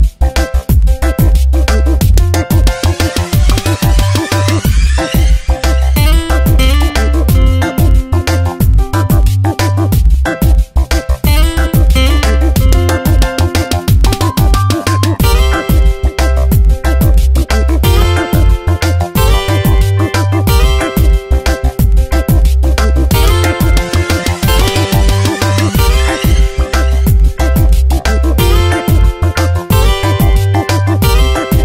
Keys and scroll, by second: 6.6 Return, 20.5 alt+BackSpace, 22.7 ctrl+alt+g, 24.3 b, 27.0 x.